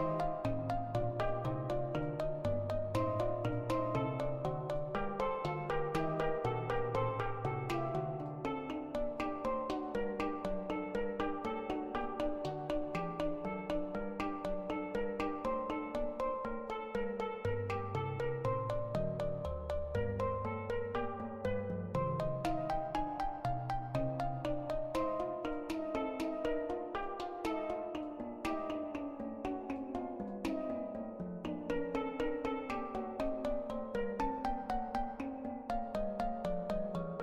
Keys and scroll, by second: 20.1 ctrl+z, 21.1-22.9 typing, 24.2 ctrl+z, 26.4 x, 26.9 x, 27.3 x, 32.9 6, 33.0 Return, 34.2 ctrl+z, 34.3-35.2 typing.